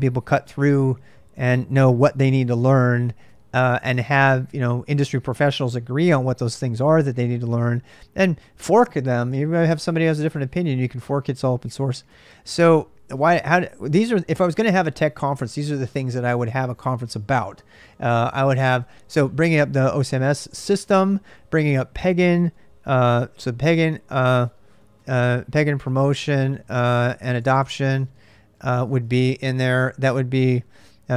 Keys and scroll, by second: 22.6-31.1 typing.